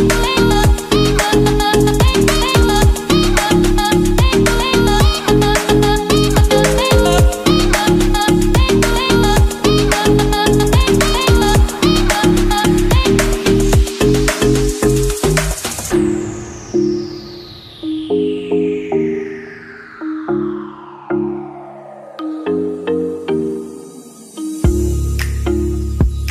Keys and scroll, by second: 0.0 Left, 13.9 5, 21.3 Right, 24.1 Right.